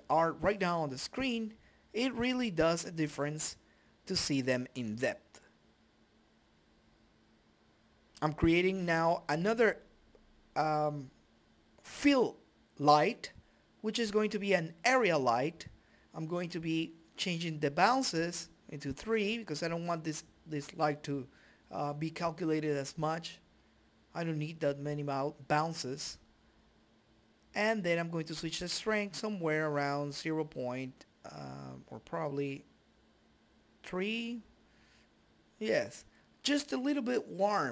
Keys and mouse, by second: 0.4 click, 0.9 right click, 2.0 click, 3.1 g, 6.5 click, 7.7 ctrl+z, 8.6 click, 10.3 click, 11.3 click, 12.0 KP_0, 14.8 click, 15.9 KP_Decimal, 20.1-21.6 drag, 22.8 click, 24.4 middle click, 29.3 click, 29.6 click, 29.8 click, 33.4 click, 35.2-37.7 drag.